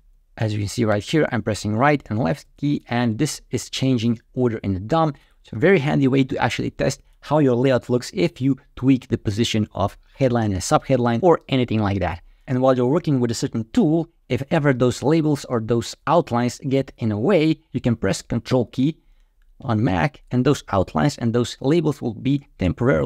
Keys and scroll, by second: 0.3 Right, 1.5 Left, 2.0 Left.